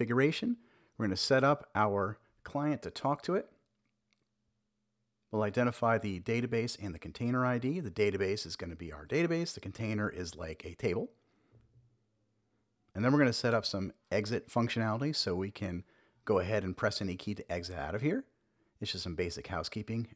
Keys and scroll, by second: 1.0 Return, 1.6 super+v, 2.2 super+s, 5.1 super+Down, 5.4 Return, 7.4 super+v, 8.6 super+s, 10.5 super+Down, 11.1 Return, 11.7 super+v, 14.2 shift+super+Left, 14.7 Delete, 17.0 Return, 17.4 super+v, 18.0 super+s.